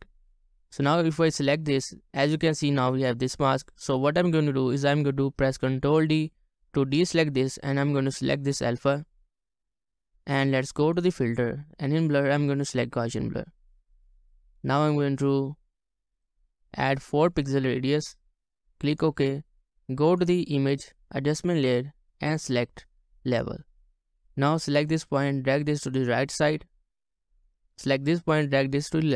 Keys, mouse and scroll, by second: 6.1 ctrl+d, 17.2 Return.